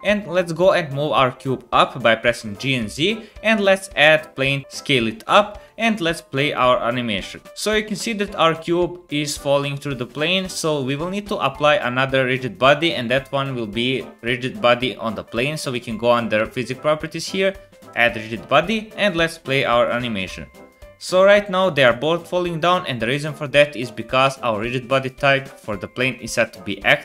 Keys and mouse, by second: 2.2 g, 3.1 middle click, 4.0 shift+a, 4.6 s, 6.4 click, 7.4 space, 9.1 space, 12.1-16.0 drag, 17.9-27.0 drag, 24.2 space.